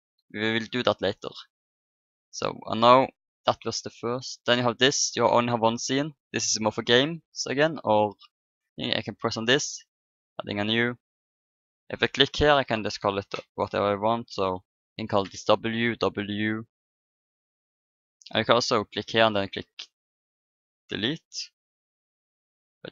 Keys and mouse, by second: 4.8-6.5 drag, 7.6-9.5 drag, 11.4-13.2 drag, 14.4 w, 17.3-19.1 drag, 20.7-22.6 drag.